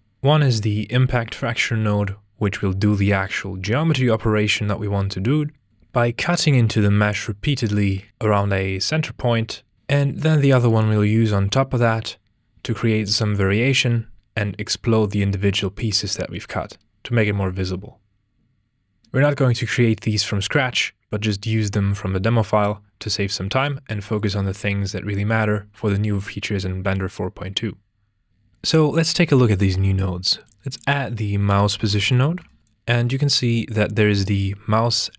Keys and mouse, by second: 5.8-9.7 drag, 9.7 Tab, 10.7-12.2 drag, 13.4-15.8 drag, 16.5 Tab, 16.8 click, 19.0 shift+a, 19.0 x, 28.3 ctrl+space, 30.1 shift+a, 33.8 click.